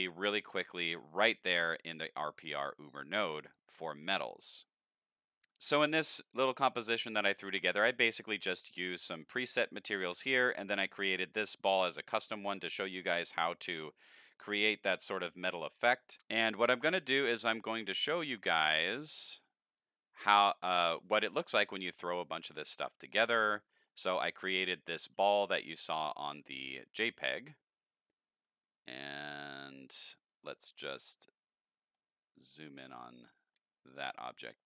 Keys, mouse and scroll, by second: 0.2 middle click, 0.2 scroll down 2, 0.7 middle click, 1.6 click, 2.9 click, 10.7 click, 16.1-16.5 drag, 17.8 click, 18.5 click, 19.6 click, 20.4 click, 22.5 click, 24.0 click, 27.2 click, 31.9-33.5 middle drag, 33.9 middle click, 34.3 middle click.